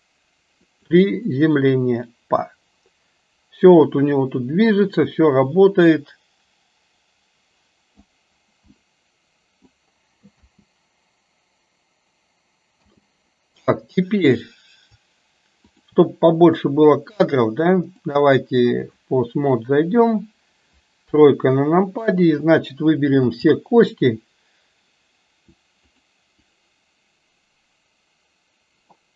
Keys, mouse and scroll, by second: 1.4-8.1 drag, 9.0-10.0 middle drag, 10.4 space, 13.0 space, 14.3 click, 18.0-19.1 drag, 21.1 KP_3, 23.3 a, 25.9 click, 26.7-29.1 drag.